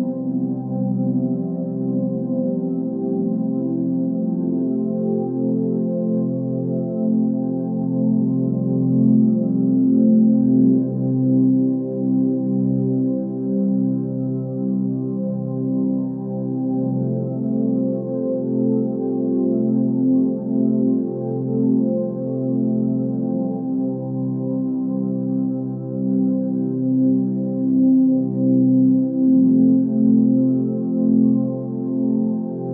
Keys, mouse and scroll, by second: 13.0 x, 16.0 x, 23.9 ctrl+space, 32.6 ctrl+z.